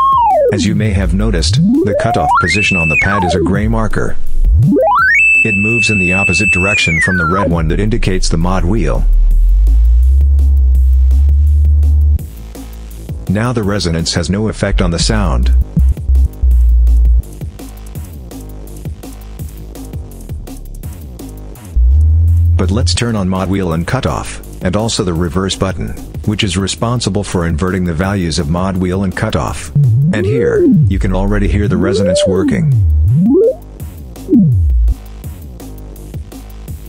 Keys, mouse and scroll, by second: 13.4 click, 14.2-17.1 drag, 18.7-21.2 drag, 21.5-22.9 drag, 23.8 click, 24.5 click, 25.8 click, 29.5-34.8 drag, 35.4 click.